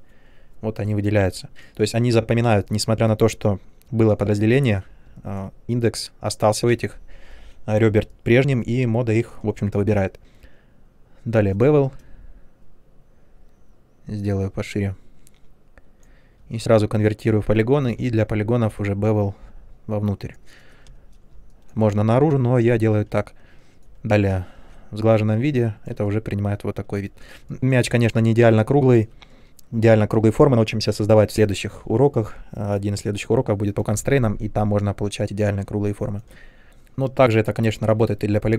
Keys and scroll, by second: 11.3 b, 16.5 alt+3, 17.8 b, 20.9 space, 22.7 ctrl+1, 24.5 shift+Tab.